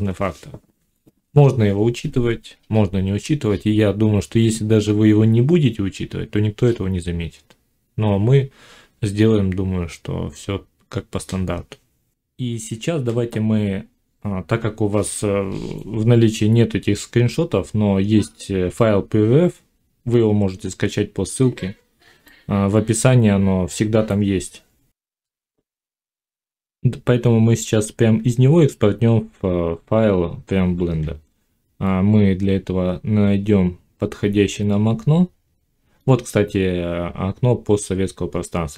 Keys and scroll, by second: 25.0 F9.